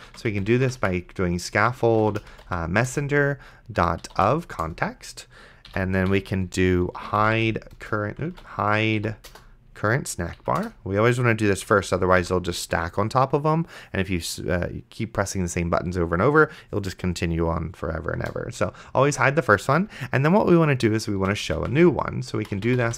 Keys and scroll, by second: 0.1-4.7 typing, 5.7 End, 6.1-7.9 typing, 8.6 ctrl+z, 9.0 e, 9.3 BackSpace, 10.4 Down, 10.6 Return, 11.6 End, 12.2 ;, 18.4 Return, 21.2-22.9 typing.